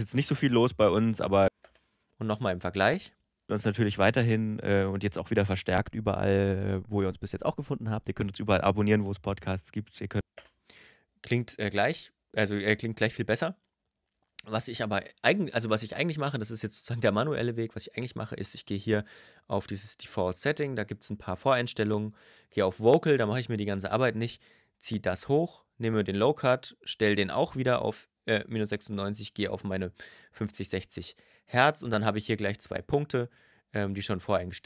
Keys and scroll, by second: 1.2 space, 3.2 space, 10.0 space.